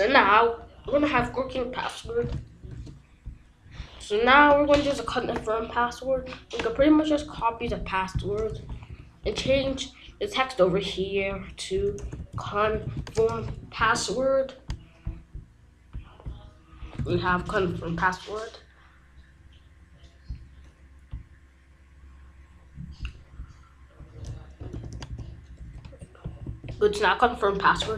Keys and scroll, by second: 2.2 f, 2.6 BackSpace, 7.2 ctrl+c, 8.4 Return, 8.8 ctrl+v, 9.4 ctrl+s, 11.6-13.4 typing, 13.5 ctrl+s, 17.0 r, 17.2 BackSpace, 24.7 Left, 25.5 BackSpace, 25.8 i, 26.4 ctrl+s.